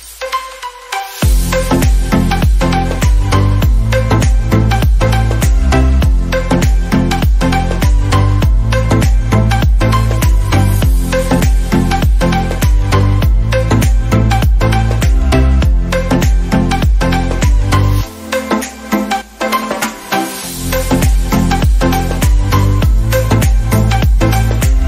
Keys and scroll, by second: 12.6 ctrl+z.